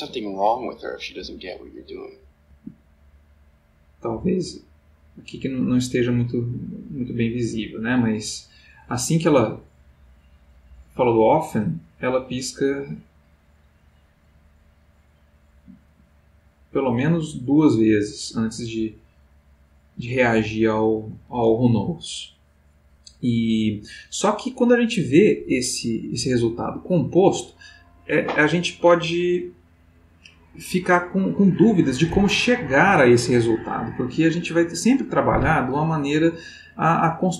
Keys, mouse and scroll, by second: 2.5 Escape, 3.7-21.0 drag.